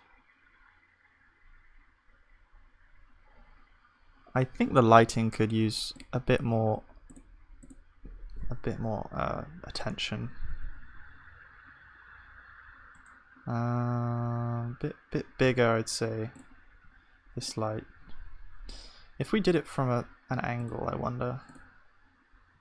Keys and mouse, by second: 20.7 ctrl+s.